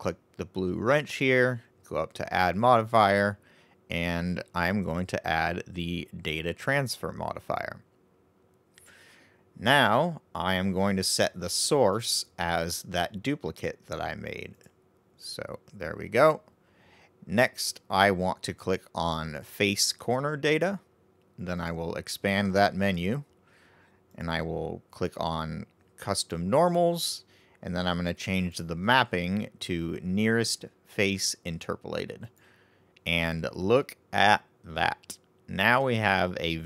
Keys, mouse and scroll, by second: 2.5-5.7 drag, 11.7 click, 19.7 click, 21.5-24.4 drag, 28.3-31.5 drag, 33.7-36.6 middle drag.